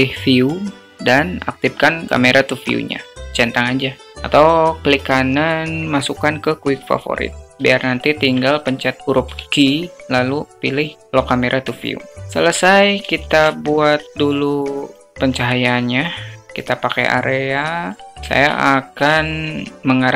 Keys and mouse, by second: 0.2 click, 8.0 n, 9.1 q, 12.2 alt+shift+click, 13.1 shift+a, 16.9 click, 18.5 alt+shift+middle drag.